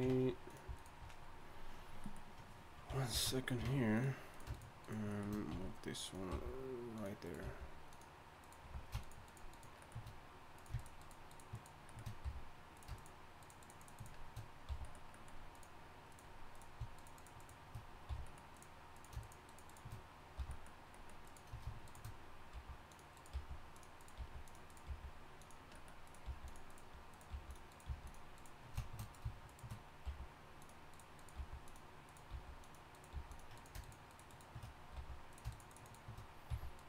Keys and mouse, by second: 0.1 ctrl+Tab, 3.1 ctrl+x, 3.6 ctrl+Tab, 5.5 r, 6.3 g, 7.2 click, 7.4 g, 10.9 middle click, 11.3 shift+right click, 12.2 f, 13.0 shift+right click, 14.7 f, 17.0 shift+right click, 18.1 f, 19.3 shift+right click, 20.4 f, 22.5 g, 23.3 g, 24.2 g, 24.9 g, 26.2 g, 27.3 g, 27.9 g, 30.0 g, 31.4 g, 32.3 g, 33.1 g, 34.9 f, 35.7 shift+right click, 36.5 f.